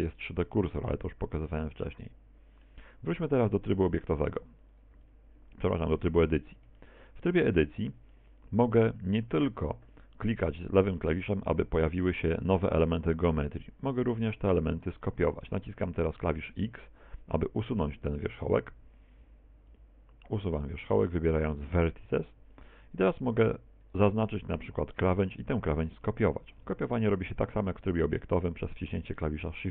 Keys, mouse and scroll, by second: 1.8 middle click, 3.0 scroll up 3, 3.8 shift+middle click, 4.8 right click, 5.0 x, 5.8 right click, 6.8 shift+middle click, 7.6 Tab, 8.2 middle click, 9.6 right click, 11.7 ctrl+click, 14.5 x, 18.8 x, 23.9 right click, 25.0 shift+right click, 27.5 shift+d, 28.6 click.